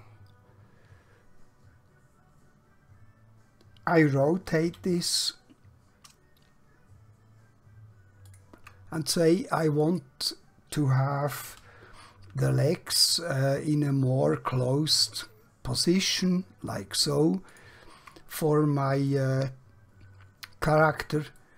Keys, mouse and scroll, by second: 4.6 r, 9.7 click, 11.4 r, 17.5 shift+click, 19.1 click, 20.2-20.6 scroll up 1, 20.6-21.2 scroll down 1, 21.4-21.5 shift+middle click.